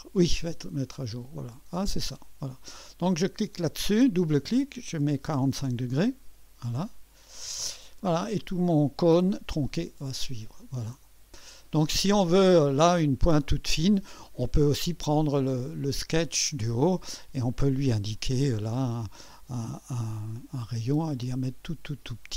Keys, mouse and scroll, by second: 1.9 click, 3.4 click, 3.6 click, 3.8 click, 4.9-5.8 typing, 7.3 click, 10.4-12.1 drag, 11.8-12.6 typing, 16.5 click, 18.1 click, 18.9 drag, 20.1-22.3 drag.